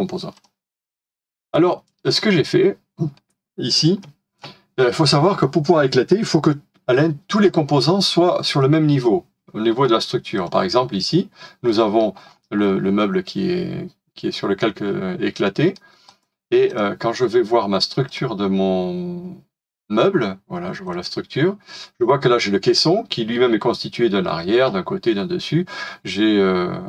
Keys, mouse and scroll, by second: 2.6 scroll down 1, 2.6 middle click, 11.7 middle click, 12.2 middle click, 12.2-12.6 scroll up 1, 15.3 middle click.